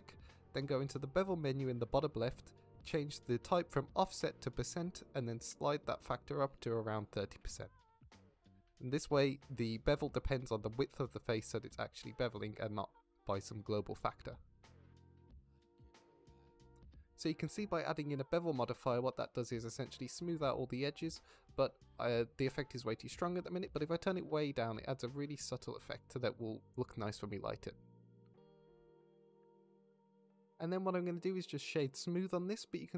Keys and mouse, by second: 4.2-5.3 drag, 6.5-10.6 drag, 15.7 click, 16.5 middle drag, 19.0 middle click, 19.8 middle drag, 20.2 shift+middle drag, 21.0-21.4 middle drag, 21.8 middle click, 26.1-29.5 shift+middle drag, 31.1 click, 32.8 shift+drag.